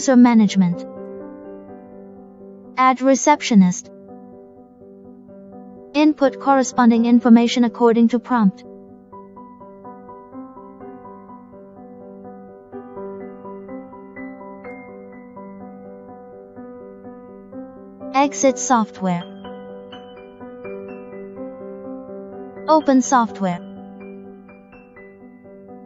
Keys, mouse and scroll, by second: 1.9 click, 4.5 click, 5.8 click, 8.2 Return, 15.8 click, 18.0 click, 20.4 click, 21.5 click, 23.9 right click, 24.7 click.